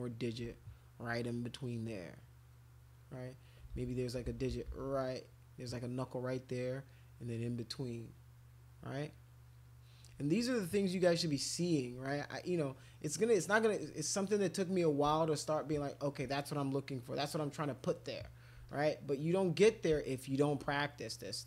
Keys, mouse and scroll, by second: 1.6 click, 2.1 click, 2.4 click, 2.7 click, 2.9 click, 3.7 ctrl+z, 4.2 ctrl+z, 4.5 ctrl+z, 4.7 ctrl+z, 5.0-6.1 drag, 6.3 click, 8.1-9.1 drag, 9.2 click, 10.3 alt+click, 11.4 click, 12.1-14.0 alt+drag, 14.3 click, 15.1-16.1 shift+drag, 16.4 click, 17.0-18.3 drag, 18.7 alt+click, 19.1 alt+click, 20.0 shift+click, 20.7 click.